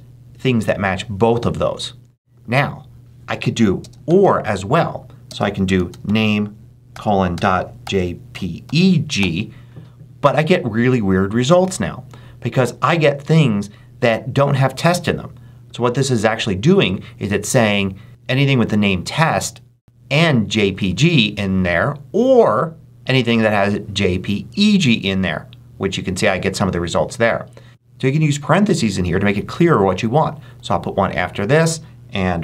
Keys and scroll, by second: 3.7-9.1 typing.